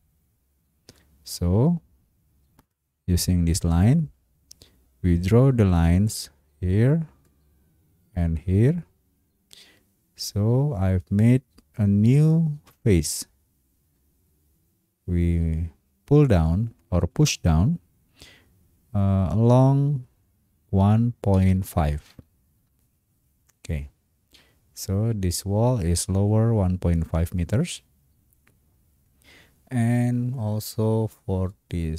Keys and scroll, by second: 13.1 Escape, 20.8 1, 21.3 ., 22.1 5, 22.6 Return.